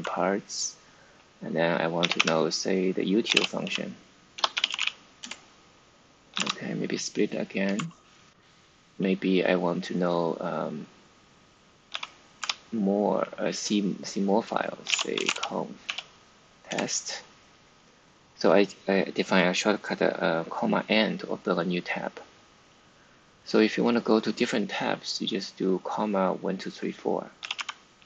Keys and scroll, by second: 0.0-0.2 typing, 1.7-7.6 typing, 11.8 ,, 12.3 n, 14.3-15.8 typing, 16.6 Return, 27.0-28.0 typing.